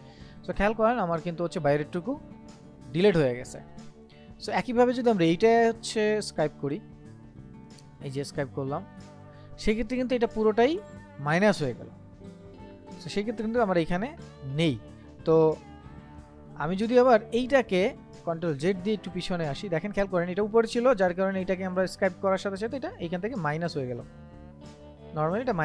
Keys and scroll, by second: 15.7 ctrl+z, 19.8 ctrl+z.